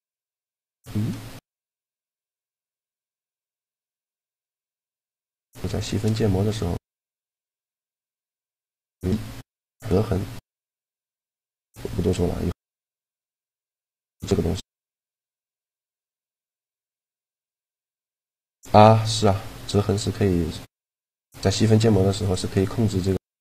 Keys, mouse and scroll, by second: 3.1-4.7 right drag, 3.6 g, 4.7 click, 6.1 g, 8.2 shift+e, 10.3 Tab, 13.9-16.1 middle drag, 16.1 Tab, 18.8-21.4 drag, 19.7 a, 21.3 Tab, 22.1-23.4 middle drag, 22.8 Tab.